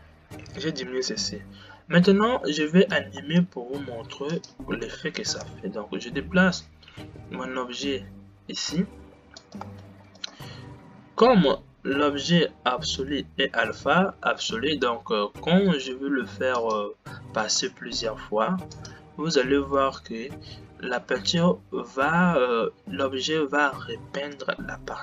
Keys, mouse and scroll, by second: 3.3 space, 4.4 click, 5.7 g, 9.9 space, 10.3 click, 17.0 click, 17.5 space, 18.8 click, 19.9 g.